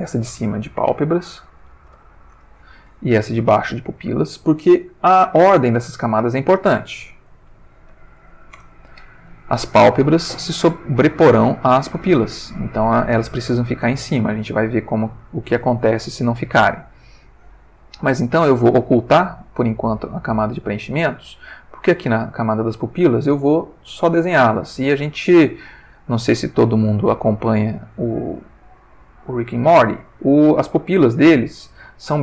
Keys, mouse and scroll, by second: 0.0-2.1 typing, 2.3 Return, 3.8 click, 7.1-8.3 typing, 8.5 shift+Return, 18.9 click, 21.7 click, 23.9 click, 25.8 click, 26.8 click, 28.6-30.0 ctrl+middle drag.